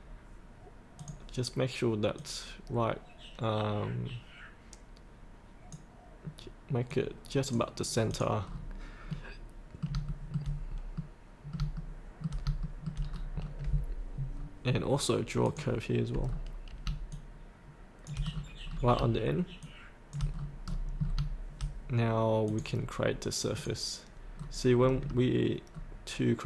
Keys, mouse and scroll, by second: 0.9 click, 8.4-8.9 scroll up 1, 9.0 middle click, 10.1 shift+middle click, 10.7 scroll up 1, 10.9 middle click, 11.7 shift+middle click, 12.6 shift+middle click, 12.9-14.3 scroll down 2, 15.4 click, 16.2-16.8 scroll down 1, 17.1 shift+click, 18.3-18.6 scroll down 1, 19.6 shift+click, 20.4 scroll up 1, 21.0 scroll up 1, 22.4 click, 24.3-24.7 scroll down 1.